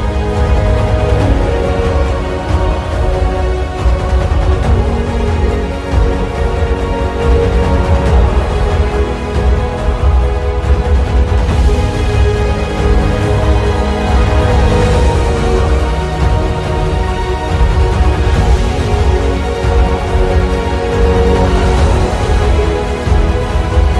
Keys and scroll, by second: 4.9 alt+space, 5.6 alt+space, 19.5 ctrl+z.